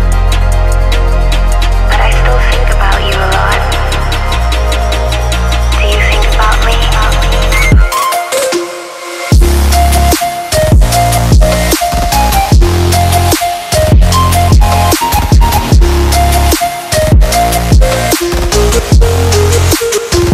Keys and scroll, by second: 1.1 alt+Tab, 2.7 ctrl+c, 3.0 Tab, 4.1 ctrl+v, 6.0 space, 7.1 space, 7.6 Tab, 10.4 Tab, 11.3 space, 12.8 alt+Right, 15.7 ctrl+g, 15.9 space, 17.1-20.3 typing.